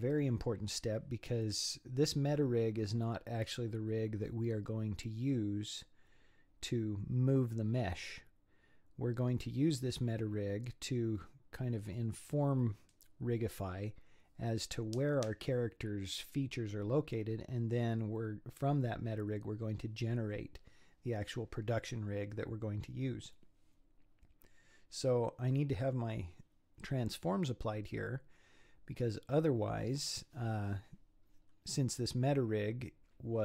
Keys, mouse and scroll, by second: 31.4-33.4 scroll down 4.